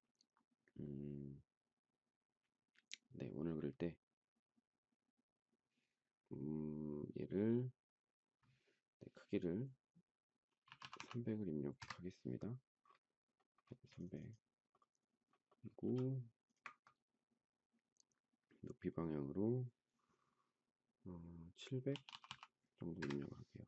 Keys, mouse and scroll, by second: 10.6-11.6 typing, 11.6 Return, 13.6 space, 15.8 m, 21.6 typing, 22.7 Return, 22.7 typing.